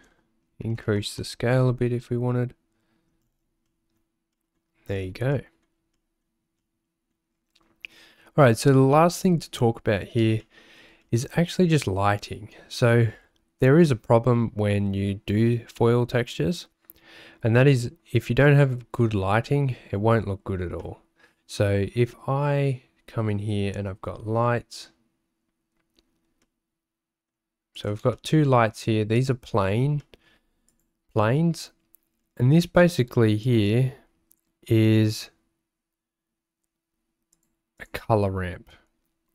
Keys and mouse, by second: 3.8 click, 4.3 click, 5.5 click, 6.1 click, 6.7 click, 10.6 shift+click, 11.1 click, 20.9-22.6 middle drag, 26.4 middle click, 27.8 click, 28.3 shift+middle click, 29.2 click, 30.1 shift+middle click, 30.7 click, 33.6 click, 37.8 click.